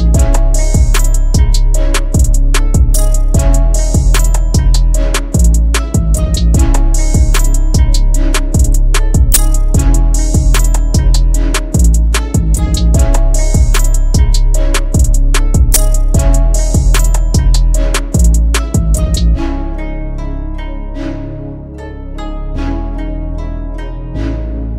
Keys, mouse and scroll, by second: 4.6 double click, 10.9-11.5 ], 15.4 double click, 24.2-24.7 typing.